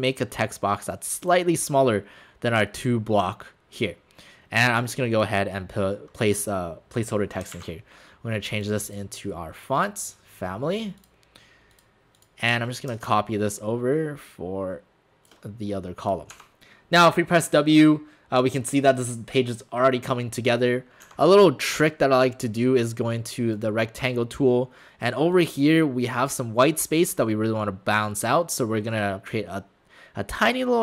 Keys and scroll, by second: 8.9 ctrl+a, 16.3 alt+shift+w, 21.1 w.